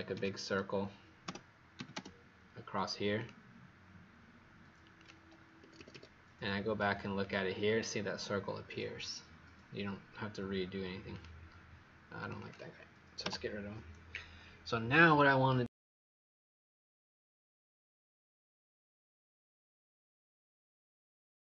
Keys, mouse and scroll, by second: 0.0-0.1 typing, 1.2-1.7 typing, 3.1 click, 5.5 Escape, 7.2 click, 12.3 click, 13.2 Delete, 17.7 click.